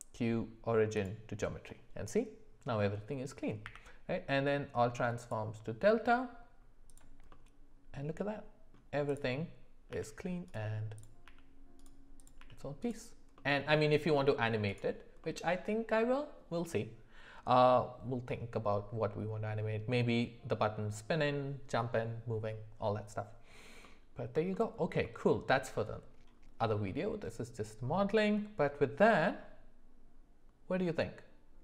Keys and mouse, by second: 3.7 q, 7.3-8.7 middle drag, 9.2 click, 9.9 g, 11.2 g, 12.2 click, 12.4 g, 13.4 middle click, 14.8 g, 15.2-15.8 middle drag, 23.8 middle click, 24.5 shift+middle click, 25.0 middle click, 29.2-31.6 middle drag.